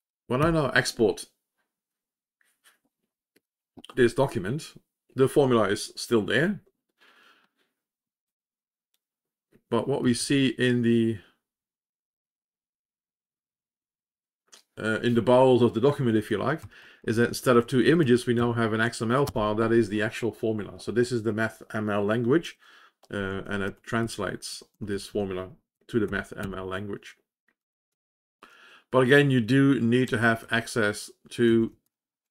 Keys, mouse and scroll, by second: 1.8 ctrl+s, 1.9 ctrl+e, 3.6 ctrl+o, 11.4 ctrl+c, 16.5 Down, 16.7 Down, 16.9 Down, 17.1 Down, 17.4 Down, 17.5 Down, 17.7 Down, 17.9 Down, 18.3 Up, 19.2 Return, 23.2 Page_Down, 23.6 Page_Down, 23.9 Page_Down, 24.4 Page_Up, 24.7 Page_Up, 24.8 Page_Up, 25.0 Page_Up.